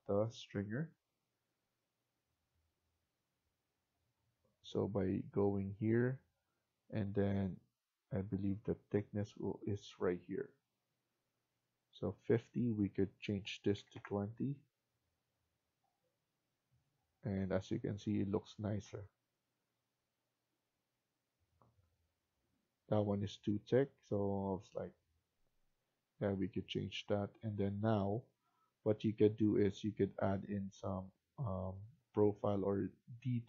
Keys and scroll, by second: 13.4-14.3 typing.